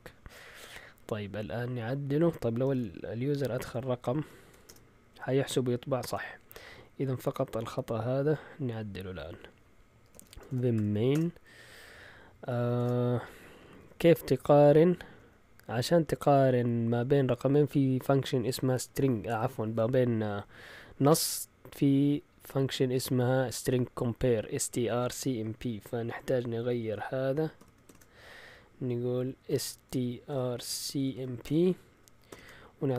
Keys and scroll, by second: 2.7-4.6 typing, 9.8-11.1 typing, 11.1 Return, 12.8 shift+g, 13.6 Up, 13.8 Up, 13.9 Up, 14.0 Up, 14.1-15.2 typing, 16.7 Right, 16.8 typing, 26.9-27.8 typing, 29.4-32.9 typing.